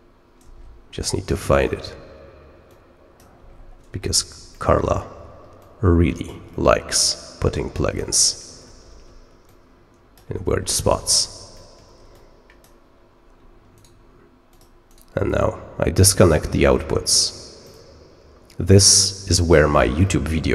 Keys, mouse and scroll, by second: 0.5 ctrl+scroll down 2, 1.6 middle click, 2.6 click, 3.4-4.7 ctrl+scroll up 5, 4.7 middle click, 5.5 click, 6.5 scroll up 2, 6.7 middle click, 7.7 click, 8.1 middle click, 8.7 ctrl+scroll down 2, 9.4 click, 10.3-11.0 ctrl+scroll up 3, 12.1 click, 13.7 right click, 14.4 click, 14.8 right click, 17.6 click, 20.0-20.5 middle drag.